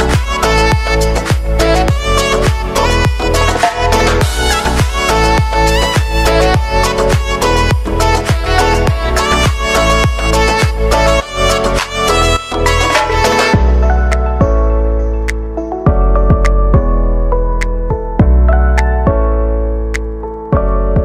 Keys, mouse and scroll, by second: 3.4 Return, 4.3 space, 7.6 click, 8.1 ctrl+d, 8.6-10.2 drag, 10.2 [, 11.5 click, 15.7 space, 17.9 -, 19.2 click, 20.0 ctrl+d, 20.5-21.0 drag.